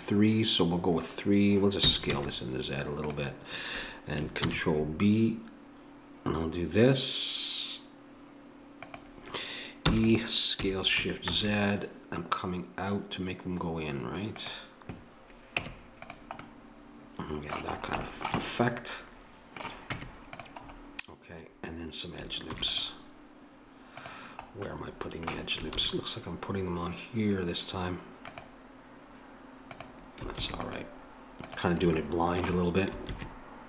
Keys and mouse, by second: 4.4 ctrl+b, 9.9 e, 15.6 Tab, 19.9 Tab, 22.5 ctrl+r, 25.7 ctrl+r, 30.3 ctrl+r, 33.1 ctrl+r.